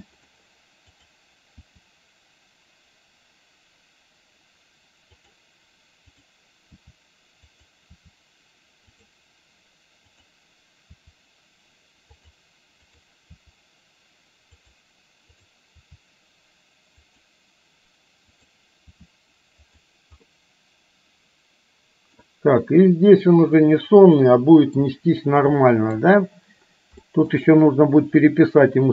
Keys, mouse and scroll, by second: 1.0 click, 1.6 r, 6.2 click, 6.8 r, 8.0 r, 10.1 click, 11.0 r, 13.3 r, 15.3 click, 15.8 r, 19.1 r, 20.3-22.2 middle drag, 22.8-25.0 middle drag, 25.7 middle click, 27.1 shift+middle drag.